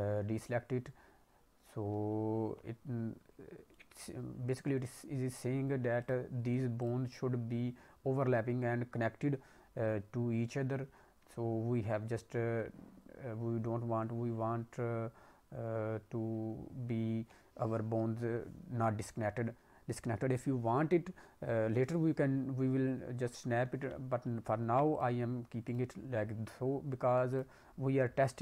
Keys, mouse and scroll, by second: 3.5 scroll up 2, 3.7 middle click, 4.1-4.7 scroll up 1, 4.7-5.9 scroll up 2, 5.9 click, 6.7 click, 24.2 ctrl+Tab, 24.7 ctrl+Tab, 24.9 click, 25.6 click, 27.2 click, 27.7-28.4 scroll down 1.